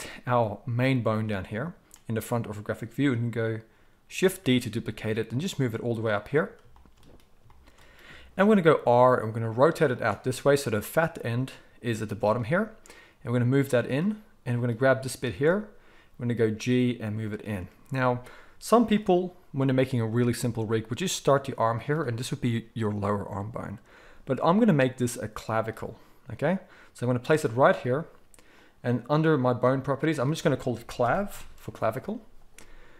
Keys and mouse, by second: 4.4 shift+d, 8.7 r, 10.8 click, 10.9-18.7 middle drag, 12.1 g, 15.4 g, 18.7 click, 18.8-28.5 middle drag, 20.5 g, 23.9 g, 28.5 click, 28.8-30.0 middle drag, 30.0-32.9 drag.